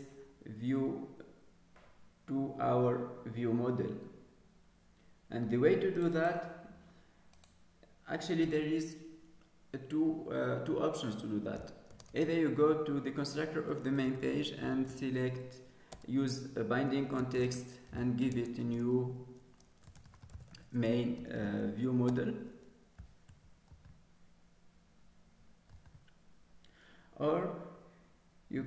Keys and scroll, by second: 23.7 ctrl+s, 25.6 ctrl+s.